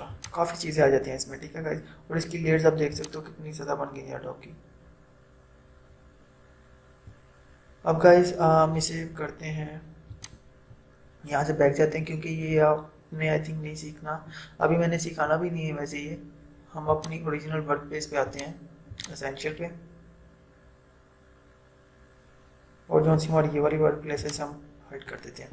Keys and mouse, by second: 3.0-9.7 drag, 10.2 click, 17.0 click, 24.3 click.